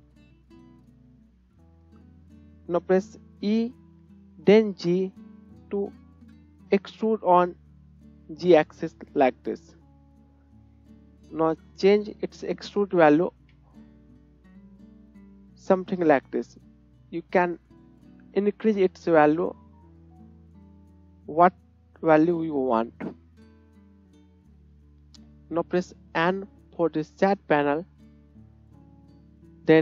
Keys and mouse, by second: 0.3 shift+click, 3.4 e, 11.1-29.8 middle drag, 26.3 n.